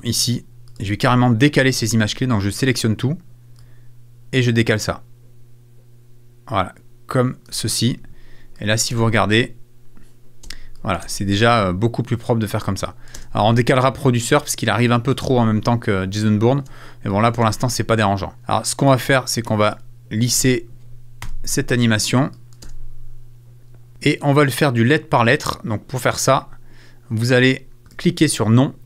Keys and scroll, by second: 1.0 super+a, 2.1 a, 8.9 space, 10.4 space, 12.5 space, 16.6 space, 20.3 super+a, 21.2 super+s, 22.6 space, 23.9 space.